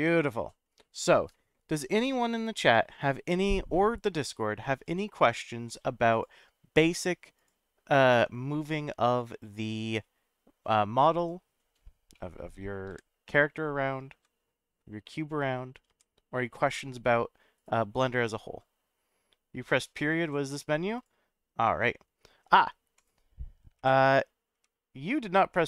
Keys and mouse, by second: 12.1 middle click, 12.9 g, 14.1 x, 15.9 y, 17.6 right click, 22.9 click, 23.8 /, 24.5 /, 25.5 middle click.